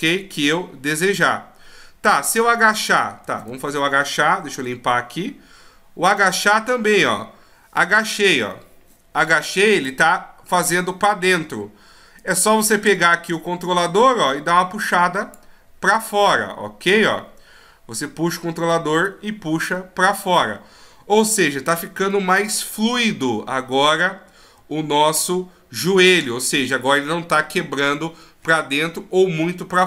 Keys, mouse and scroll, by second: 2.7 right click, 3.3 a, 3.5 a, 4.8 alt+g, 6.1 right click, 7.0 click, 10.2 middle click, 12.2 right click, 13.6 click, 15.9 middle click, 19.7 middle click, 20.6 scroll down 1, 22.1 middle click, 24.2 scroll up 3, 24.9-25.3 shift+scroll down 1.